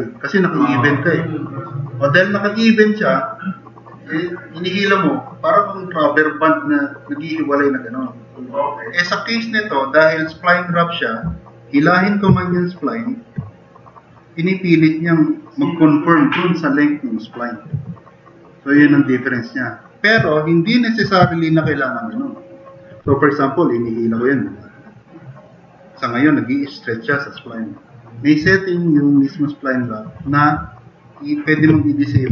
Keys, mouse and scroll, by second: 12.9 drag, 14.2-14.6 drag, 18.7-20.0 drag, 20.2-20.8 drag, 21.3 drag, 24.2-24.6 drag.